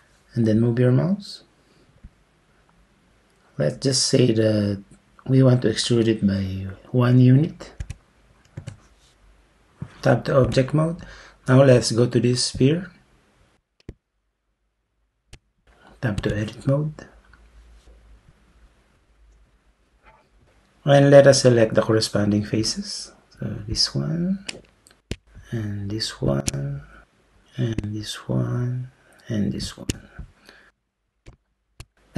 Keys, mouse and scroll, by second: 7.8 1, 8.6 Return, 10.5 Tab, 16.2 Tab, 26.3 shift+click, 29.7 shift+click.